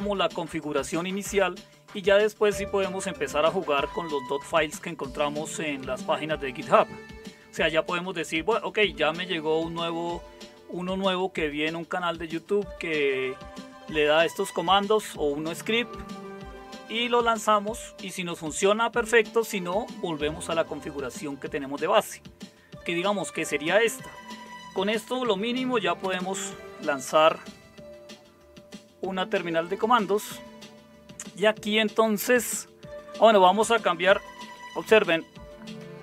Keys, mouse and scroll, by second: 26.0 super+Return, 34.4-36.0 typing.